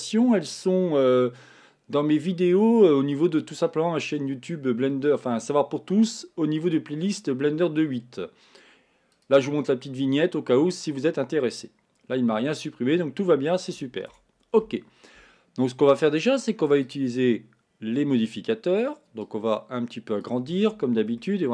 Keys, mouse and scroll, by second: 19.4-21.3 drag, 21.3-21.5 shift+middle drag.